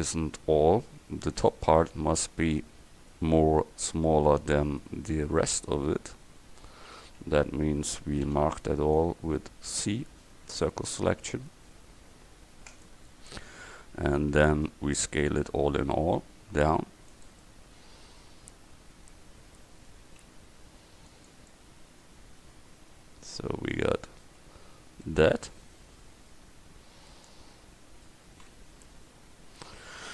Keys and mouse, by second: 1.9 Tab, 7.1 a, 8.3 c, 15.1 s, 20.3 s, 24.5 Tab, 28.0 middle click, 28.9 KP_1.